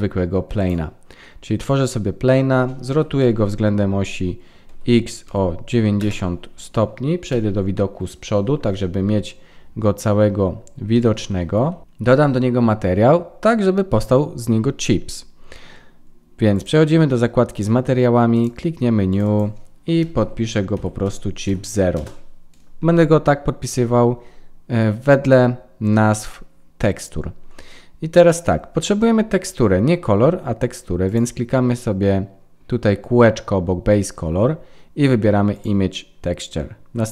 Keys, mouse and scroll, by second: 1.5 middle click, 2.9 r, 7.3 KP_1, 9.2-9.8 scroll up 3, 9.8 scroll up 2, 10.9 shift+middle click, 16.5 click, 18.3 click, 31.0 click, 37.0 click.